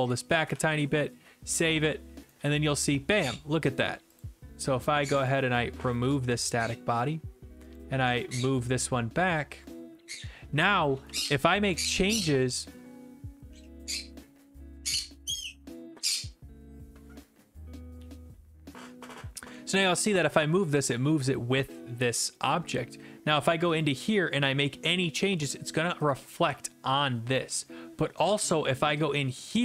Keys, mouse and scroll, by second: 0.1 click, 0.5 ctrl+s, 1.6 click, 2.2-4.3 typing, 3.8 right click, 4.2 click, 5.8 click, 6.0 Delete, 7.0 click, 7.8 click, 8.2 click, 10.8 click, 11.0 d, 11.7 w, 12.2 w, 12.2 w, 12.6 right click, 21.3 click, 23.8 click, 26.1 click, 26.5 click, 28.3 click.